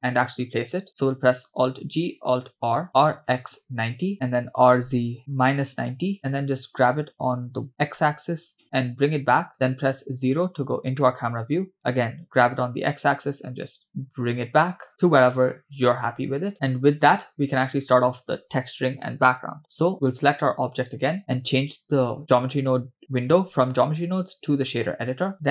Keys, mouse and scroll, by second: 1.8 alt+g, 3.0 alt+r, 4.1 middle click, 6.1 r, 6.7 g, 9.8 KP_0, 11.5 g, 16.6-17.6 scroll down 2, 21.2 click, 23.2-24.8 drag.